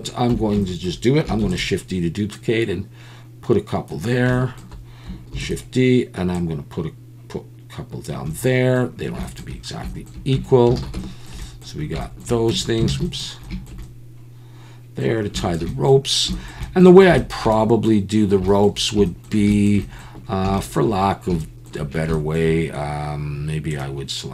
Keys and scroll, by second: 0.3 Tab, 1.4 shift+d, 1.5 Tab, 5.3 shift+d, 10.4 Tab, 10.8 alt+a, 12.5 Tab, 12.9 alt+a, 13.0 Tab, 13.7 alt+a.